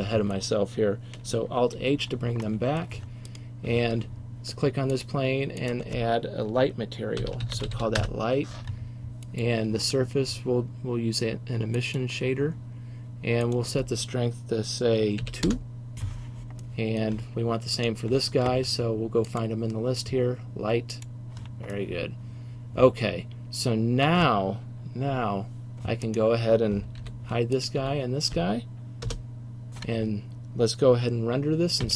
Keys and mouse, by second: 0.0 middle click, 1.8 alt+h, 2.5 middle click, 2.7 middle click, 3.4-5.1 drag, 11.1 middle click, 27.1 h, 27.8 h, 29.1 KP_0.